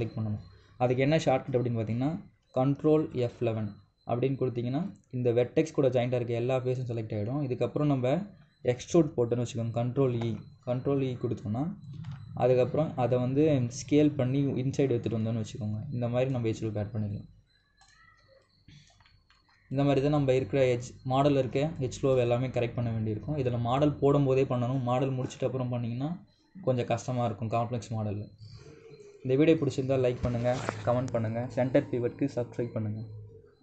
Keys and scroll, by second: 3.9 ctrl+F11, 10.9 ctrl+e, 12.8 r.